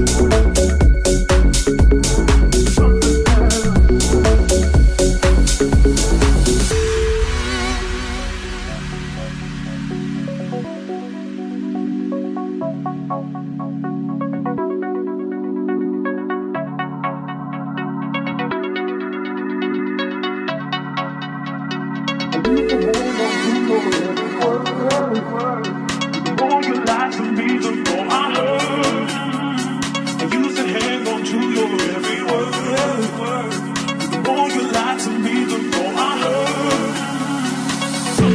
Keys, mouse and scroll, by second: 0.1 middle click, 0.1 right click, 2.5 right click, 3.6 right click, 4.3 right click, 4.8 right click, 7.0 right click, 10.1 shift+click, 10.8-17.1 shift+drag, 14.1-15.4 right drag, 17.7 click, 18.0-21.1 drag, 21.1-22.1 shift+middle drag, 21.2 shift+s, 22.1 right click, 22.1-38.3 middle drag.